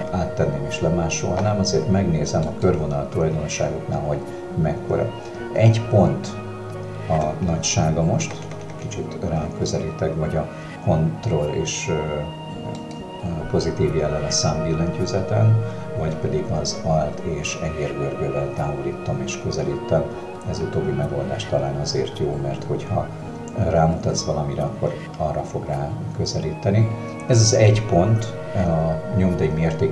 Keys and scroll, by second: 8.4 ctrl+KP_Add, 14.4 w.